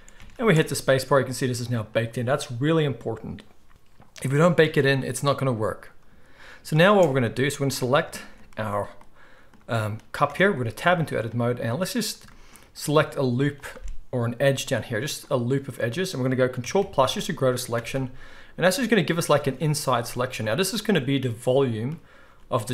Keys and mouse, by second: 0.1 alt+a, 0.5 space, 6.9 space, 7.8-12.5 shift+middle drag, 10.3 Tab, 13.5 alt+shift+click, 14.4 g, 16.6 ctrl+KP_Add, 17.6-22.7 ctrl+middle drag, 22.3 z.